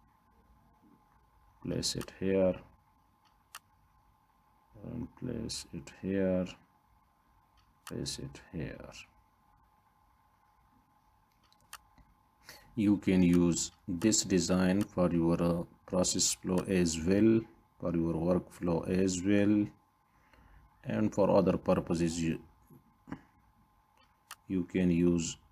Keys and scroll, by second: 15.8 ctrl+d, 22.5 ctrl+d.